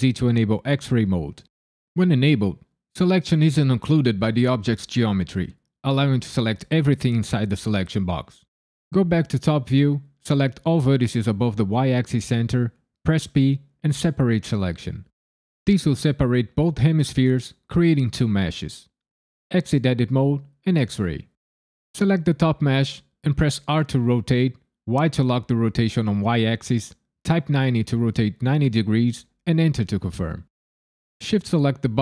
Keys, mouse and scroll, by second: 8.9 KP_9, 10.4 click, 13.2 p, 19.5 Tab, 20.6 alt+z, 21.9 click, 23.6 r, 24.9 y, 27.5 KP_9, 27.7 KP_0, 29.5 KP_Enter, 31.9 shift+click.